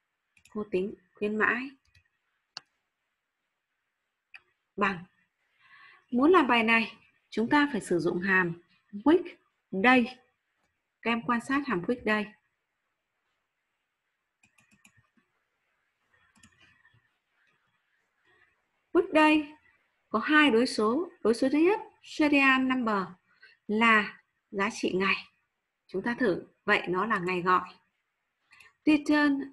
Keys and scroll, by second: 11.5 ctrl+v, 12.0 ctrl+v, 12.0 w, 12.0 BackSpace.